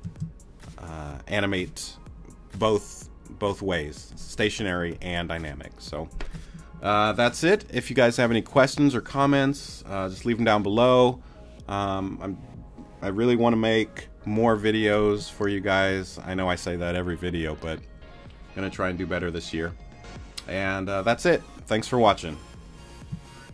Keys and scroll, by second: 0.0 space.